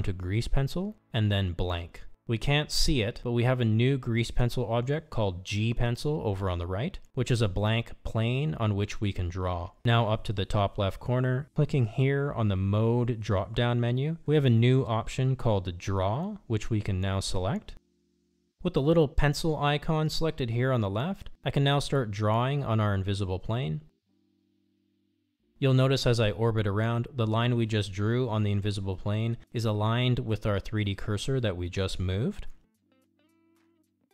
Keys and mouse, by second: 11.7-18.3 drag, 23.6-25.4 drag, 31.0-34.1 middle drag.